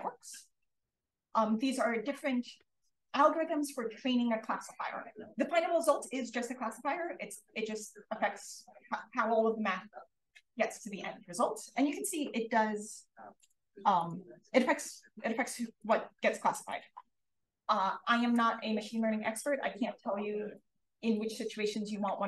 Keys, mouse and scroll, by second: 13.3 click, 13.9 click, 15.7 click, 16.6-20.1 drag.